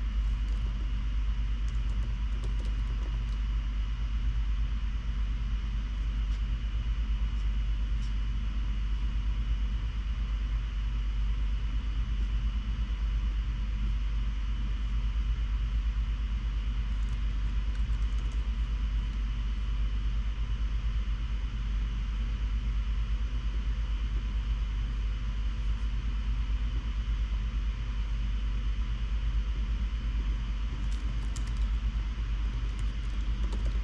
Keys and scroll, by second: 0.4-3.8 typing, 17.5 shift+super+Left, 18.0 super+x, 18.2-18.5 typing, 32.0-33.8 typing.